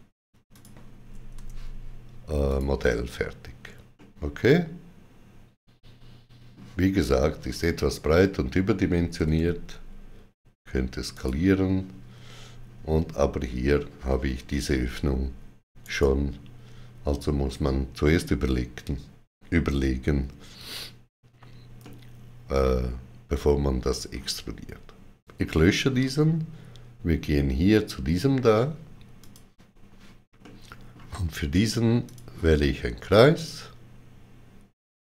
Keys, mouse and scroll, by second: 0.4 click, 1.2 Tab, 2.4 click, 3.8 middle click, 9.0 middle click, 9.0 click, 9.0 s, 11.0 click, 11.0 typing, 15.7 right click, 15.7 click, 21.7 middle click, 21.7 right click, 21.7 click, 25.1 x, 29.0 click, 30.2 middle click, 31.9 click, 33.2 middle click, 33.2 click.